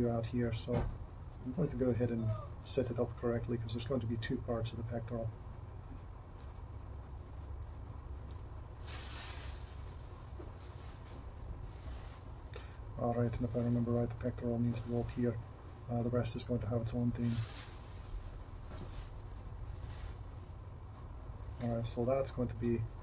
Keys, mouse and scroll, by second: 3.9 e, 6.5 g, 7.7 r, 8.4 g, 10.7 g, 13.7 r, 18.9 g, 19.5 r.